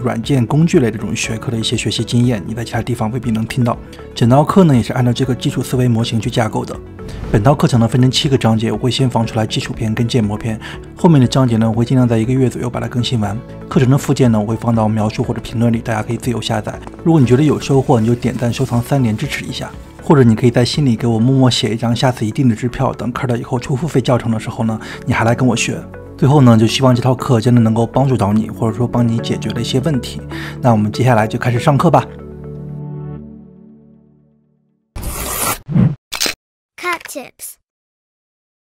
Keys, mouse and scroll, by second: 0.0-0.8 typing, 0.0 Delete, 0.7 click, 0.7 middle click, 0.9 scroll down 2, 0.9 click, 0.9 middle click, 1.0 middle click, 1.0 middle click, 1.7 click, 1.9 scroll up 2, 2.1-3.2 middle drag, 2.8 scroll down 2, 3.2-3.7 scroll up 3, 3.7 shift+middle click, 4.2 scroll up 1, 4.6 click, 5.3 scroll down 2, 5.5 middle click, 6.6 click.